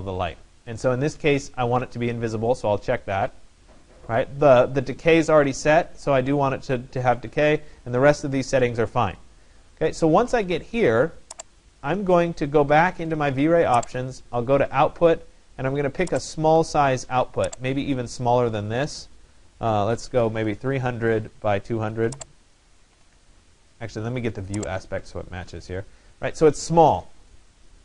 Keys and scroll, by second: 20.5 0, 22.8-23.7 typing.